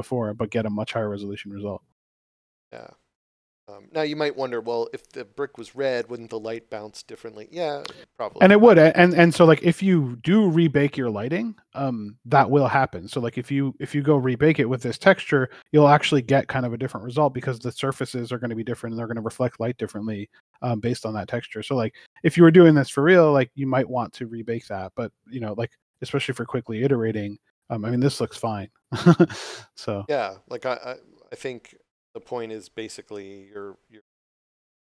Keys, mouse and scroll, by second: 0.4 scroll down 1, 2.3 click, 9.5 click, 10.7 scroll up 1, 11.5 click, 13.4 scroll down 1, 19.0 click, 22.2 click, 25.9 click, 27.8 scroll down 1, 33.9 scroll up 1.